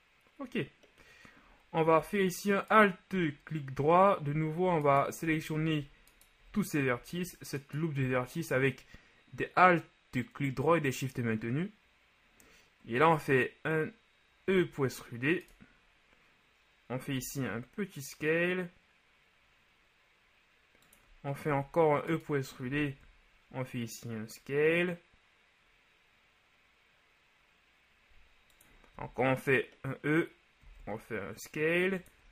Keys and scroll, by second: 14.6 e, 17.1 s, 21.5 shift+e, 22.7 s, 28.9 e, 30.6 s.